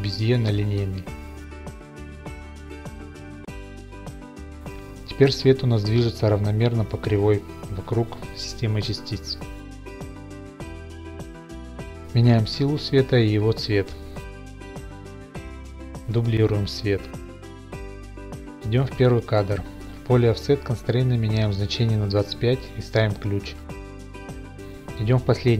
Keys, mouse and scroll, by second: 0.4 Home, 1.4 a, 2.2 t, 3.0 click, 3.6-4.8 drag, 4.8-5.5 drag, 5.6 click, 7.2 click, 12.3 click, 12.7 click, 13.1 click, 13.4-14.9 typing, 13.9 Return, 14.3 click, 16.3 click, 16.5 d, 18.0 right click, 19.5 click, 20.0 Left, 20.8 click, 23.1 typing, 23.6 Return, 24.2 right click, 24.5 click.